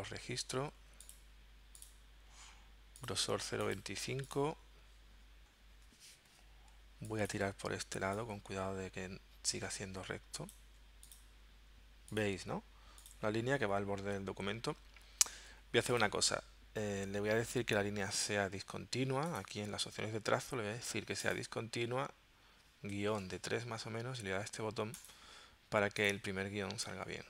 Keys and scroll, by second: 6.3 v, 23.0 3, 23.2 Tab.